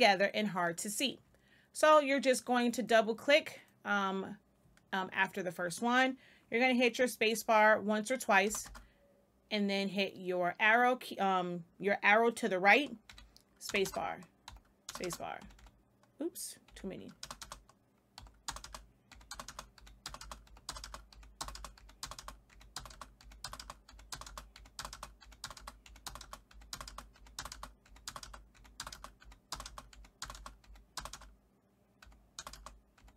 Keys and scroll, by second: 8.4 space, 13.0 Right, 13.6 space, 14.4 Right, 14.8 space, 15.3 Right, 17.1 space, 18.1 Right, 18.4-30.9 typing, 19.0 Right, 19.7 Right, 20.4 Right, 21.1 Right, 21.7 Right, 22.4 Right, 23.1 Right, 23.8 Right, 24.5 Right, 25.2 Right, 25.8 Right, 26.4 Right, 27.1 Right, 27.8 Right, 28.5 Right, 29.1 Right, 29.9 Right, 30.6 Right, 31.9 Right, 32.3 space, 32.9 Right.